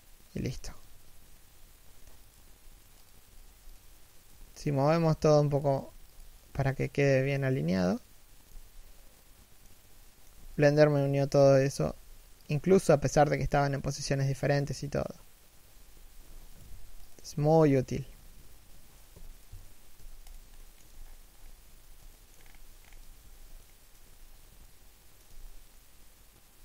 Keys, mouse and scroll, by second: 1.9 right click, 2.0 g, 2.9 right click, 4.0 g, 5.5 right click, 5.6 g, 6.1 right click, 6.2 g, 8.2 z, 8.9 middle click, 10.0 z, 10.3 right click, 10.9 1, 11.5 g, 12.3 a, 15.6 z, 16.3 right click, 16.4 g, 17.0 a, 18.9 l, 20.3 shift+middle click, 20.6 z, 20.7-21.8 scroll up 1, 21.8 shift+middle click, 22.0 scroll up 1, 22.9 z, 23.3 shift+middle click, 23.9-24.4 scroll down 1, 24.4 shift+middle click, 24.9 z.